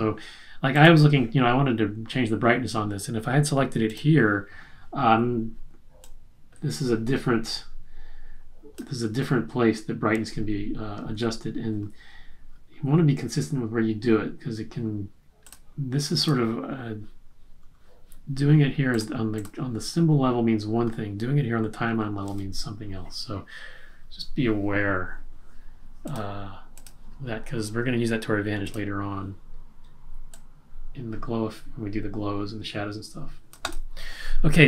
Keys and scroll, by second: 11.1 super+z.